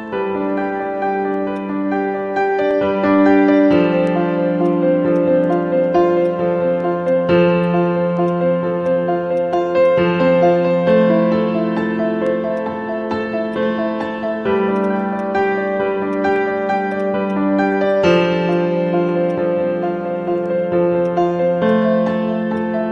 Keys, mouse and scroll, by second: 1.5 alt+click, 3.7 right click, 7.0 right click, 9.8 alt+click, 12.0-12.3 scroll down 1, 12.3 scroll up 1, 12.5 alt+click, 14.0 alt+click, 14.8 double click, 15.1 alt+click, 15.5 scroll up 1, 15.8 scroll down 1, 16.1 alt+click, 16.9 double click, 17.2 alt+click, 17.5 scroll up 1, 18.2 alt+middle click, 19.0 alt+scroll up 1, 20.2 alt+middle click, 20.5 scroll down 1.